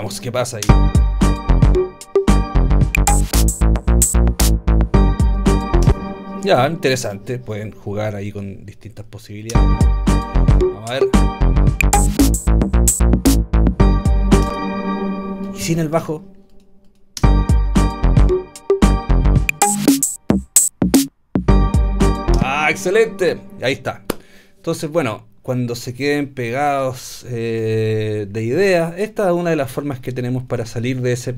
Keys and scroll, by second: 0.6 space, 5.9 space, 9.5 space, 14.4 space, 16.0 BackSpace, 17.2 space.